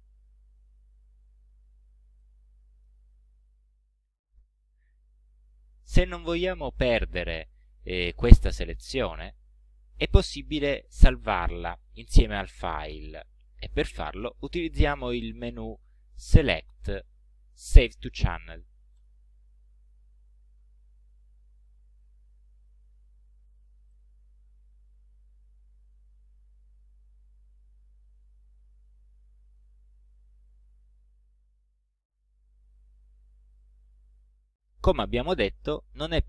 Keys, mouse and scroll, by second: 1.2-1.6 ctrl+scroll down 2, 2.2 ctrl+click, 3.5 ctrl+scroll down 2, 4.3 ctrl+scroll up 2, 15.2 right click, 19.0 click, 23.9 click, 26.4 ctrl+shift+a, 28.9 click, 29.9 ctrl+scroll down 2, 30.4 ctrl+scroll up 2.